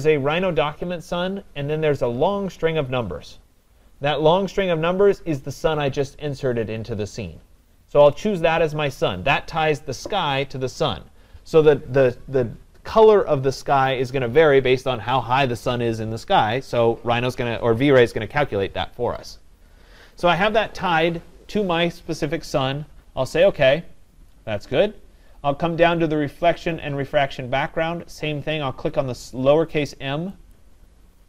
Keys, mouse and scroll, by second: 8.2-13.2 drag, 23.5 click, 30.6 click.